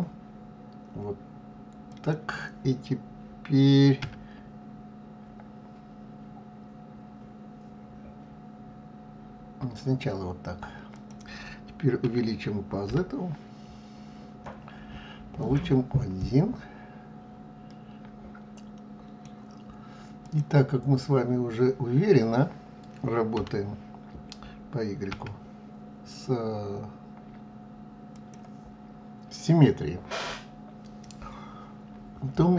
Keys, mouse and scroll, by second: 4.0 s, 12.0 s, 16.2-19.2 middle drag, 20.2 click, 23.3 g.